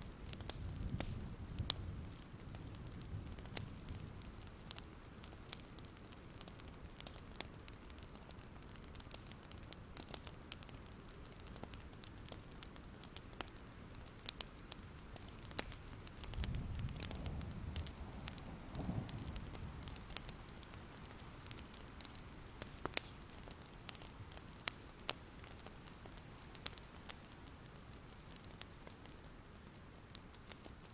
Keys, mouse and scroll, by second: 0.7 click, 1.4 scroll down 1, 1.7-3.5 scroll up 1, 3.5 click, 5.7 shift+click, 8.4 alt+scroll down 1, 9.0 scroll up 1, 9.3 click, 10.6-16.0 drag, 17.7-19.6 scroll up 1, 19.6-21.0 drag, 23.3 ctrl+z, 23.7 alt+scroll up 1, 25.7-27.5 drag, 29.0 alt+scroll down 1, 29.2-30.9 drag.